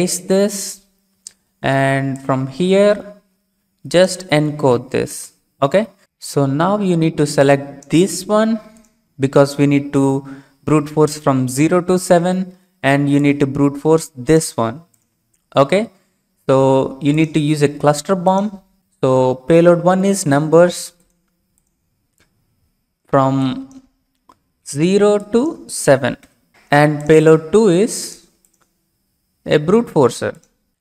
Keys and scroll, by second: 5.0 ctrl+u, 24.6 typing, 26.2 typing.